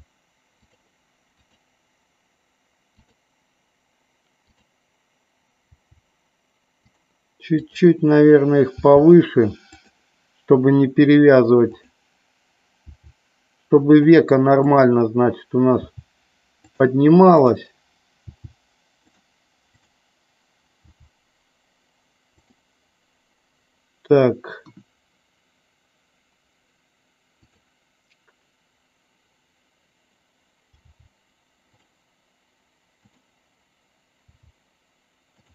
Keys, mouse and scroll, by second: 0.7 click, 1.5 click, 3.1 click, 4.6 click, 7.6 click, 8.8 g, 9.8 click, 11.7 click, 12.9 g, 13.9 click, 14.7 click, 16.7 click, 17.5 click, 18.4 g, 19.2 click, 20.0 click, 22.5 click, 24.7 KP_1, 30.8 g, 33.1 click, 34.5 g.